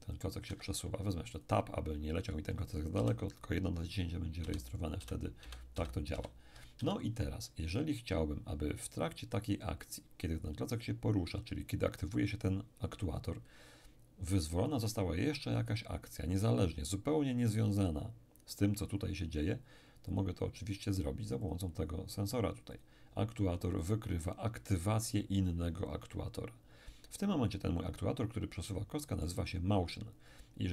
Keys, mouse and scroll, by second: 0.4 Escape, 1.4 click, 2.9 p, 4.4 d, 5.0 d, 5.4 d, 6.8 Escape, 8.2-8.8 scroll down 1, 8.8-9.5 scroll down 1, 9.6-10.8 scroll up 2, 20.1 click, 21.4 click, 22.7-24.8 drag, 28.6-29.7 middle drag, 29.7-30.7 scroll up 1.